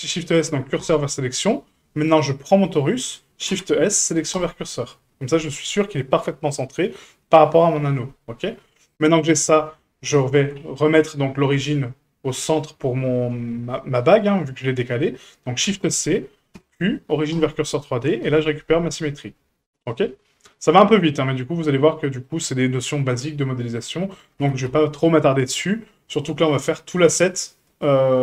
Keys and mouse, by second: 2.1 right click, 3.5 shift+s, 8.9 right click, 10.5 q, 11.3-11.7 shift+middle drag, 15.6 shift+c, 16.5 q, 18.2 KP_Decimal, 19.6-20.0 shift+middle drag, 21.1 click, 21.9-22.2 shift+middle drag, 22.8-23.1 middle drag, 23.4-23.8 shift+middle drag, 24.4 g.